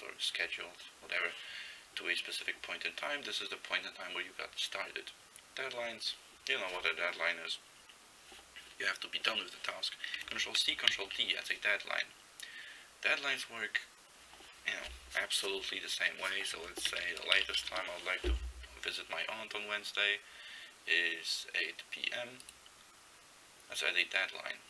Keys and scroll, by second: 10.6 ctrl+c, 11.0 ctrl+d, 16.7-18.3 typing.